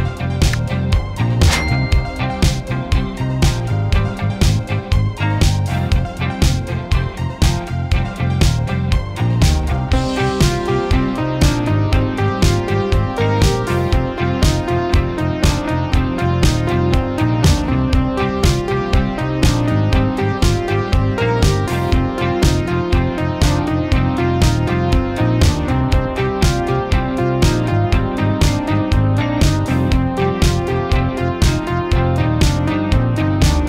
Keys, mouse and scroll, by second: 0.7-1.5 typing, 2.4 Return, 3.6 click, 7.4 shift+i, 8.6 ctrl+a, 9.6 click, 10.3 1, 12.6 click, 14.8 Caps_Lock, 15.2-25.5 typing, 26.8 click, 30.9 Caps_Lock, 32.7 click, 33.1-33.6 typing.